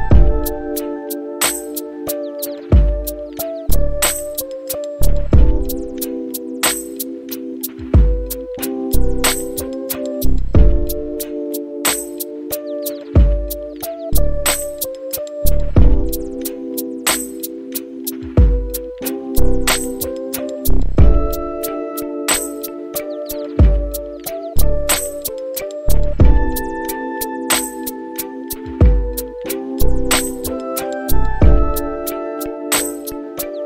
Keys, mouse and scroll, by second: 0.1 click, 6.2-13.7 drag, 19.6 shift+Left, 21.3 space, 28.3 space, 30.5 shift+Left.